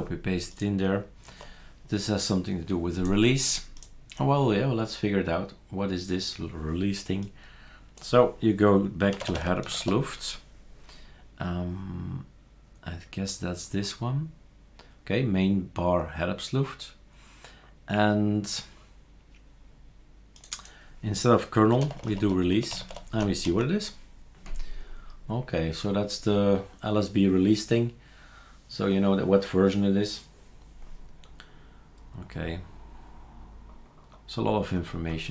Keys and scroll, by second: 1.3 super+q, 8.9-10.3 typing, 21.5-23.5 typing.